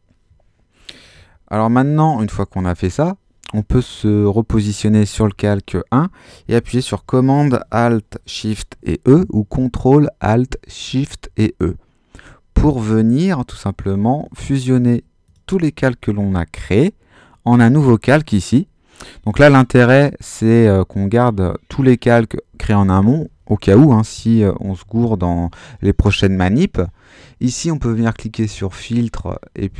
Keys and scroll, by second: 1.1 super+-, 11.2 alt+shift+super+e.